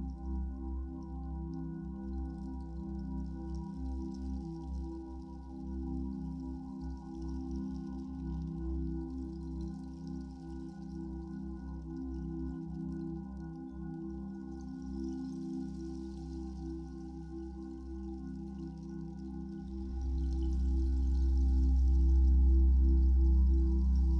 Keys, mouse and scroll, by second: 5.3-10.8 middle drag, 6.9 ctrl+z, 10.8-17.5 drag, 17.1-17.5 scroll down 2, 17.5-24.1 shift+middle drag, 18.8 scroll down 2, 19.6 scroll down 2, 20.7 scroll up 1.